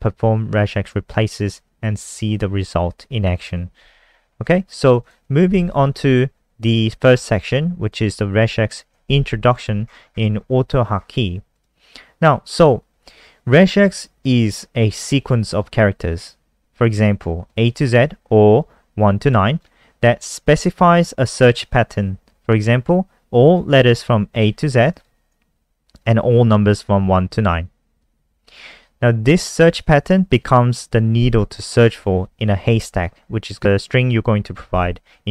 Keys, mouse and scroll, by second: 4.4-4.8 scroll up 5, 5.0 click, 5.4 ctrl+a, 8.4 click, 9.0 ctrl+a, 9.3 alt+1, 9.3 alt+v, 9.8-10.9 scroll up 18, 11.0-11.5 scroll up 3, 11.5 click, 24.9 shift+click, 28.0 click.